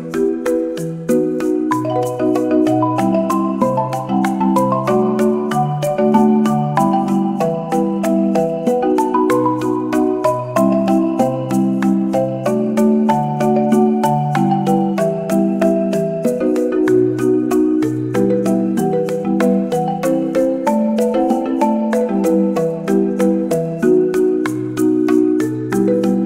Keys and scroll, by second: 5.6 e.